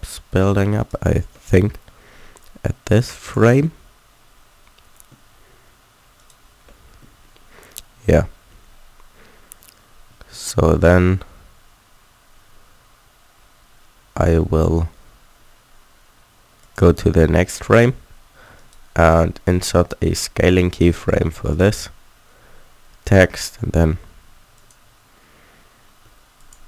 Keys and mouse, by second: 0.8-2.4 drag, 2.4 middle click, 3.4 click, 3.7 middle click, 6.1-9.7 drag, 10.1 a, 10.3 a, 16.6-18.5 drag, 18.5-20.3 middle drag, 20.3-24.5 drag.